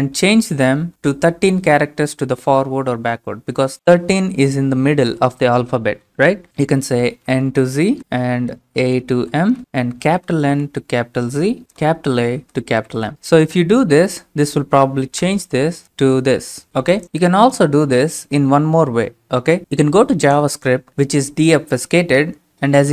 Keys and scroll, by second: 0.0-0.2 typing, 7.2-13.2 typing, 15.2 Return.